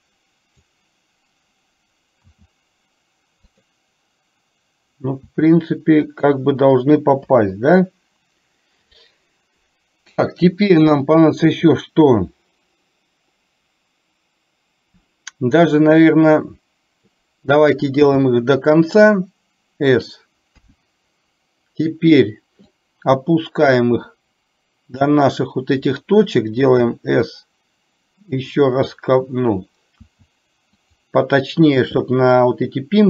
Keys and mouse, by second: 7.3 KP_7, 20.6 KP_1, 22.8-25.1 drag.